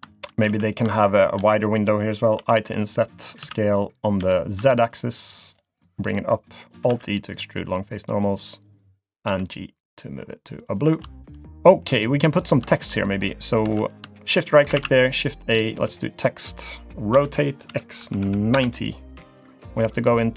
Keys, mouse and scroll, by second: 0.5 3, 0.6 click, 1.0 shift+click, 2.4 i, 3.4 s, 6.1 click, 6.9 alt+e, 9.3 g, 10.9 scroll down 1, 11.2 shift+middle click, 11.9 click, 12.2 middle click, 12.7 shift+middle click, 13.6 Tab, 14.2 shift+right click, 14.8 shift+a, 17.1 r.